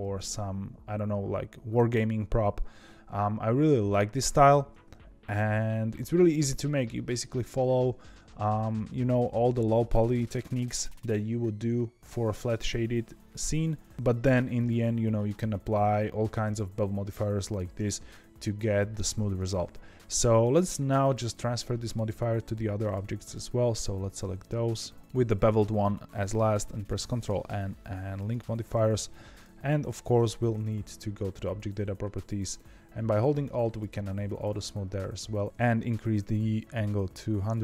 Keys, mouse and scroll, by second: 3.3-5.2 scroll down 2, 22.8 click, 23.2 shift+click, 24.3 shift+click, 27.0 ctrl+l, 29.2 click, 29.8 click, 30.1 shift+click, 33.6 alt+click, 34.3-37.6 alt+drag.